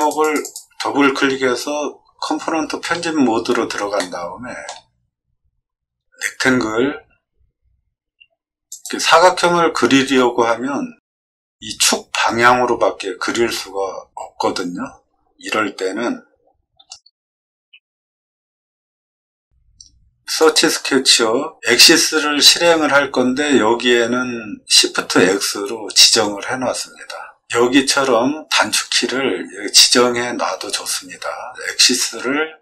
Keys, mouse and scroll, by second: 0.2 click, 0.4 click, 1.8-2.6 scroll up 3, 3.2 scroll down 2, 3.9 shift+middle click, 6.3 r, 8.7 click, 16.7 Escape, 18.5 middle click, 20.3 click.